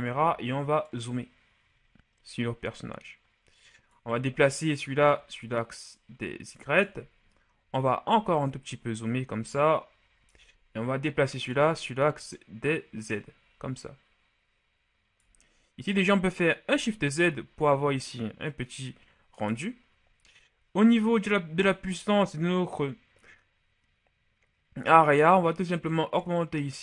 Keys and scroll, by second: 16.6 shift+z.